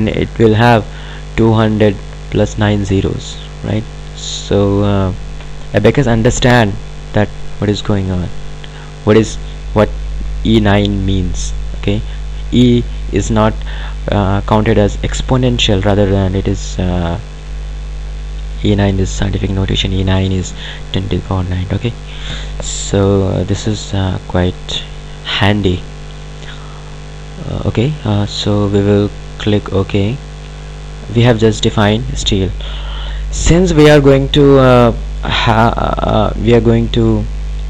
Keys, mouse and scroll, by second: 26.5 click, 29.8 click.